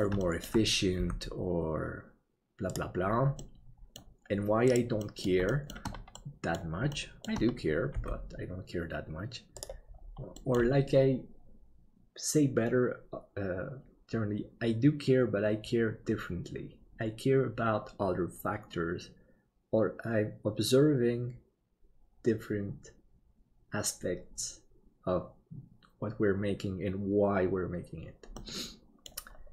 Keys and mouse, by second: 0.3 shift+middle click, 1.0 g, 3.4 middle click, 4.8 right click, 5.0 middle click, 5.5 shift+middle click, 6.1 middle click, 7.0 shift+middle click, 10.5 middle click, 28.5 middle click.